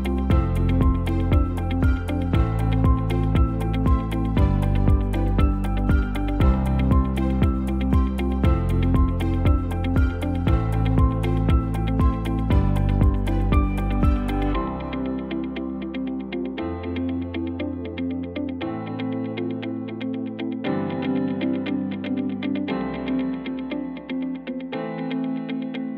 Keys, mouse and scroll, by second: 5.1 KP_0.